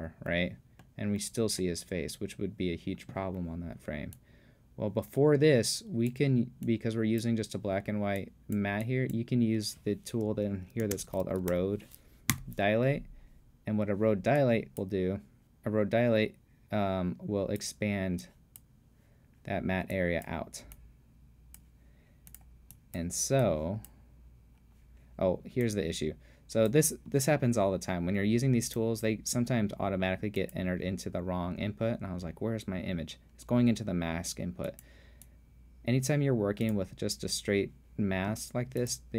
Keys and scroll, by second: 10.9-12.0 typing, 12.3 Return.